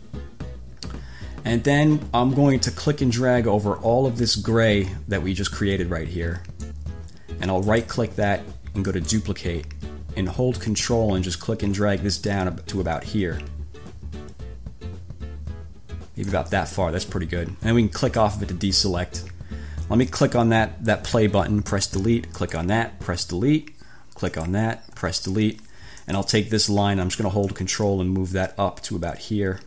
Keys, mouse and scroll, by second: 3.1-7.1 drag, 7.9 right click, 9.1 click, 11.0-16.7 ctrl+drag, 18.2 click, 20.3 click, 21.9 Delete, 22.6 click, 23.3 Delete, 24.5 click, 25.2 Delete, 26.1 click, 27.7-29.6 ctrl+drag.